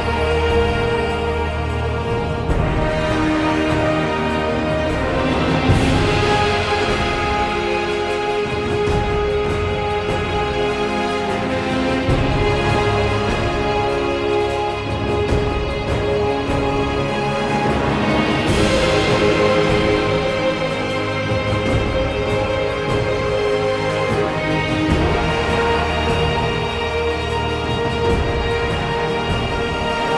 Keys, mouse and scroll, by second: 0.0 ctrl+z, 1.0 click, 1.1 ctrl+z, 4.0 ctrl+z, 5.4 ctrl+z, 25.6 ctrl+z, 28.1 ctrl+z.